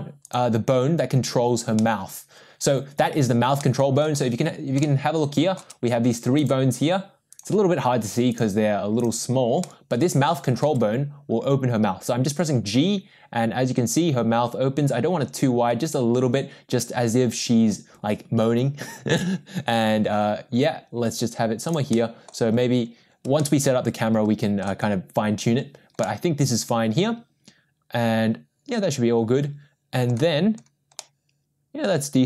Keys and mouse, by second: 1.8-3.0 middle drag, 3.6-4.0 middle drag, 4.8-5.5 shift+middle drag, 6.3 click, 7.3 click, 8.3 click, 9.6-10.5 middle drag, 11.5 g, 21.9-22.2 middle drag, 23.4-24.6 middle drag, 26.0-30.1 middle drag, 31.0-32.2 middle drag.